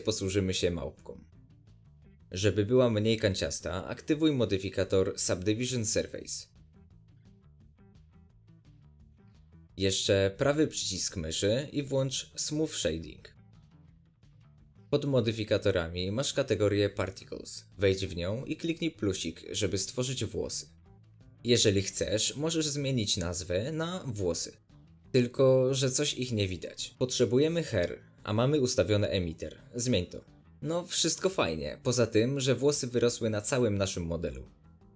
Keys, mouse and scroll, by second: 1.3-1.6 scroll up 2, 1.6-4.3 middle drag, 2.4-3.0 scroll up 2, 4.3-10.6 drag, 10.6 scroll down 2, 10.8-12.9 middle drag, 12.9 right click, 14.3-15.8 middle drag, 15.8-27.2 drag, 25.4 Return, 26.8-27.2 scroll up 1, 27.2-29.6 shift+middle drag, 29.6-34.9 drag.